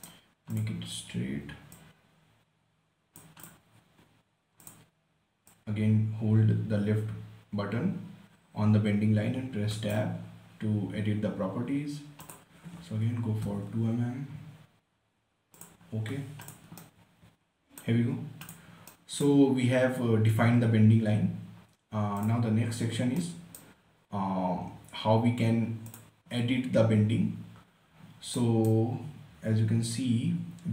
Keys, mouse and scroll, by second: 0.1 scroll up 1, 0.3 right click, 0.9-3.8 drag, 4.1-4.9 scroll down 1, 4.9-10.1 drag, 10.1 Tab, 12.6 click, 13.1-14.4 typing, 15.9 click, 17.1-18.5 right drag, 18.5 scroll down 1, 18.8 click, 19.2-22.0 right drag, 22.6 click, 23.5-26.3 right drag, 26.3 click, 28.7 right click, 29.9 scroll up 1.